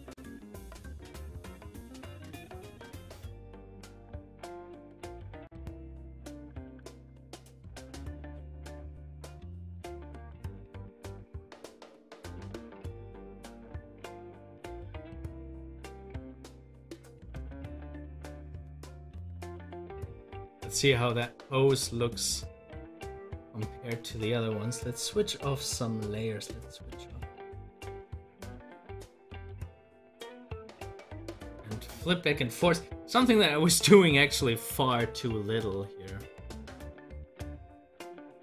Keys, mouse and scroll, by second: 5.9 click, 7.0 ctrl+z, 20.6 click, 20.7 double click, 22.7 click, 22.8 double click, 27.6 click, 34.8 ,, 38.0 click.